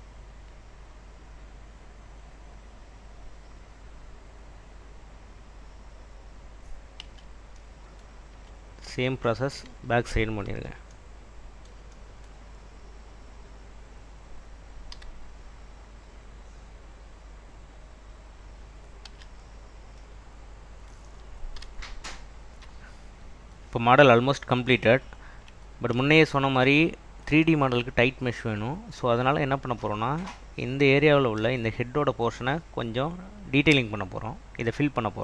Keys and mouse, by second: 2.1 click, 4.1 click, 7.1 Tab, 10.5 alt+Tab, 15.1 e, 17.0 click, 17.7 click, 19.2 Tab, 21.7 /, 33.8 Tab.